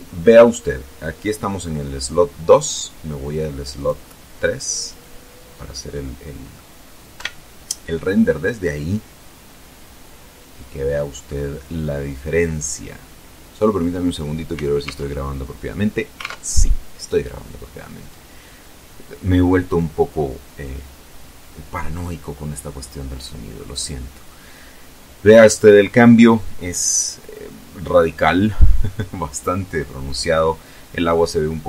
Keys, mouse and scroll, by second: 0.9-1.2 scroll down 1, 1.4 scroll up 1, 2.9 click, 3.9 click, 5.0 click, 5.7 scroll up 2, 6.3 F12, 12.0 scroll down 2, 13.9 alt+Tab, 15.3 alt+Tab.